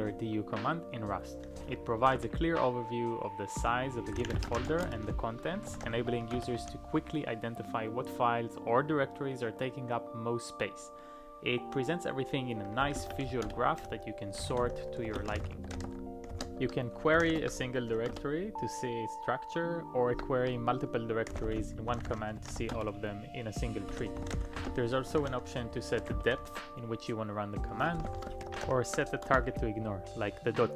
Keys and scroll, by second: 1.6-2.0 typing, 2.2 ctrl+a, 3.9-5.2 typing, 5.7 ctrl+p, 5.9 ctrl+p, 6.4 Return, 12.6-18.6 typing, 19.9-26.1 typing, 28.1 ctrl+a, 28.5 ctrl+p, 28.6 ctrl+p, 29.3 Return.